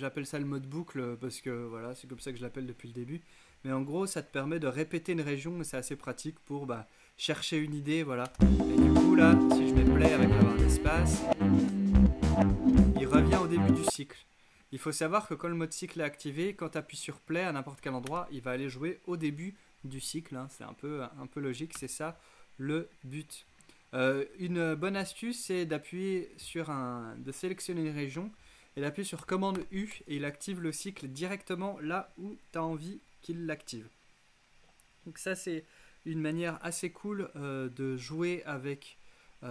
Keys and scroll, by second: 8.3 space, 13.9 space, 18.1 space, 21.8 space, 29.6 super+u.